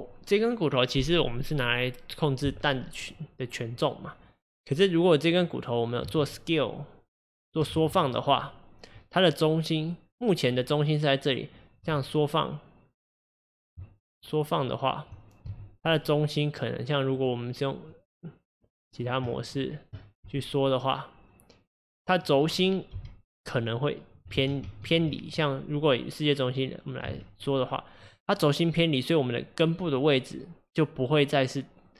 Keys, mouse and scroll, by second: 6.1 s, 7.8 ctrl+z, 11.8 s, 13.8 Tab, 15.5 s, 16.0 click, 17.2-20.2 drag, 20.3 s, 23.0 g, 24.5 ctrl+z, 24.7 ctrl+z, 25.3 click, 27.1 s.